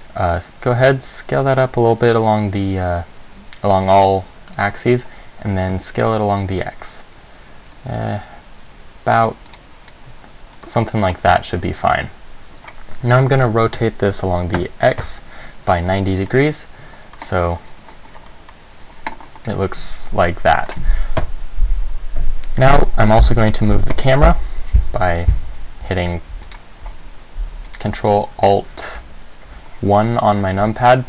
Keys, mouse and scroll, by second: 1.0 s, 4.8 click, 5.7 s, 9.7 click, 10.1-10.7 scroll down 1, 10.7-11.5 scroll up 1, 11.5 Tab, 13.7 r, 15.3 KP_1, 16.5 middle click, 18.6 middle click, 19.9 middle click, 21.4 KP_1, 24.1 ctrl+alt+KP_1, 26.7 right click, 27.9 right click.